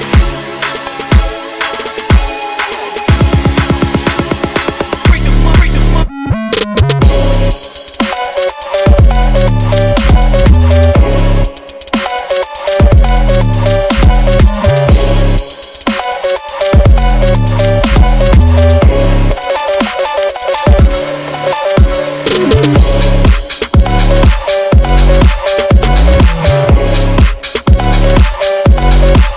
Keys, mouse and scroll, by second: 0.6 scroll up 3, 0.8 click, 1.2 g, 1.9 ctrl+z, 2.0 click, 2.1 click, 4.0 Tab, 4.2 Tab, 4.5-7.7 typing, 5.0 click, 6.0 click, 6.7 click, 7.5 click, 8.3 click, 9.2 r, 9.6 g, 10.2 r, 10.5 click, 10.8 scroll up 3, 11.1 click, 11.3-13.2 typing, 13.6 click, 14.2 click, 15.7 click, 16.8 /, 17.1 click, 17.3 g, 17.8 click, 18.1 s, 18.5 click, 18.9 r, 19.8 click, 19.8 click, 20.4 scroll up 3, 20.6 click, 21.1 r, 21.6 click, 22.1 click, 22.2 r, 23.4 click, 26.0-28.3 drag.